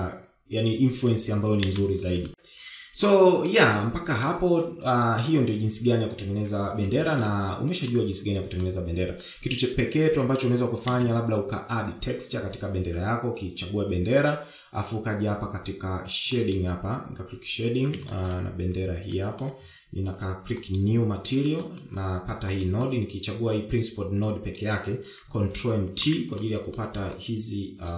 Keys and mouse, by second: 1.5 space, 2.1 shift+middle drag, 3.7-4.4 shift+middle drag, 7.3-8.1 shift+middle drag, 8.8-9.5 shift+middle drag, 10.9 space, 11.5 click.